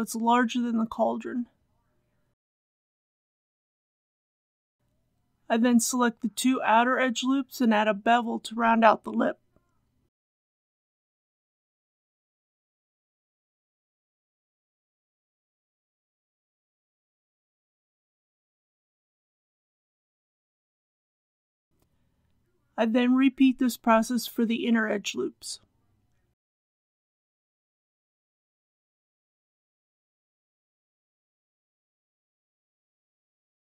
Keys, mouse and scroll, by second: 2.2 click, 2.4-3.7 middle drag, 3.7 2, 4.3 alt+click, 4.7 middle click, 6.5 alt+shift+click, 7.8 ctrl+b, 14.0-15.5 scroll up 1, 15.5 click, 17.0 Tab, 17.5-20.6 middle drag, 20.7 Tab, 21.8 alt+click, 23.0 alt+shift+click, 24.1 ctrl+b, 31.5 Tab, 32.0 click, 32.6 scroll down 1, 33.3-33.7 middle drag.